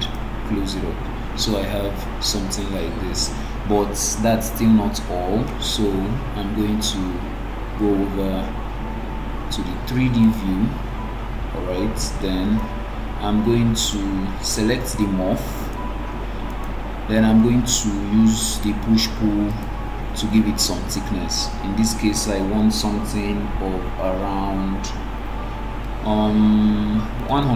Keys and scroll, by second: 14.5 Escape.